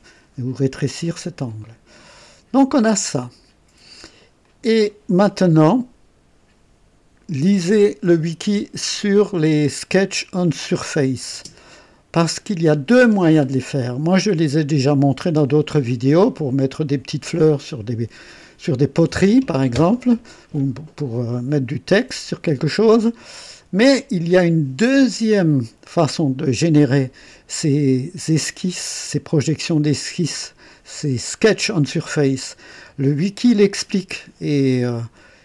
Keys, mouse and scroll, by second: 2.0 click, 3.0-4.1 drag, 4.4 click, 11.3 space, 12.3-13.0 drag, 16.2 right click.